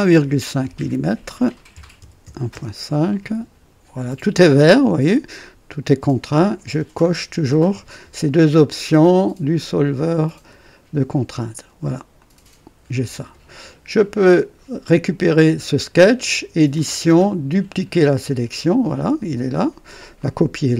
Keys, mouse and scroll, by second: 0.5 click, 1.7 KP_1, 1.9 KP_Decimal, 2.1 KP_5, 2.4 Return, 12.1 click, 14.3 click, 16.6 click, 17.9 click, 20.1 click.